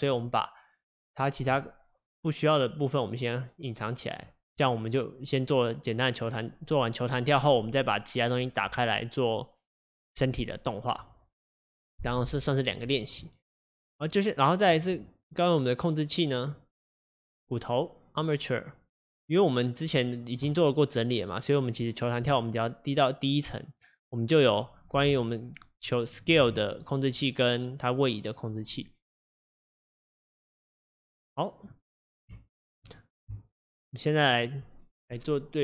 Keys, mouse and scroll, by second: 0.1 click, 2.2-14.8 drag, 22.3 click, 25.1 s, 26.4 ctrl+z, 27.3 click, 30.5-35.6 drag.